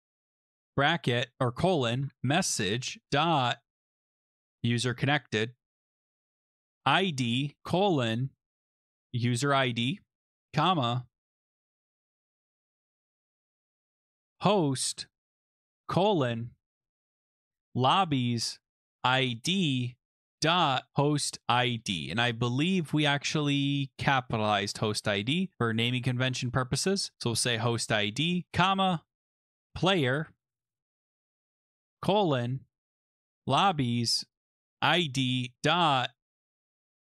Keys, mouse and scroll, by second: 0.0-4.4 typing, 4.5 Tab, 5.5-9.2 typing, 11.3 Tab, 11.3-12.5 typing, 11.7 Return, 13.9-21.7 typing, 17.5 Tab, 18.1 Tab, 18.3 Tab, 23.5 click, 23.9 Tab, 23.9 click, 24.0 click, 24.5 ctrl+c, 25.2 click, 25.7 click, 25.8 click, 25.9 ctrl+v, 26.4 click, 28.5-37.1 typing, 28.6 Return.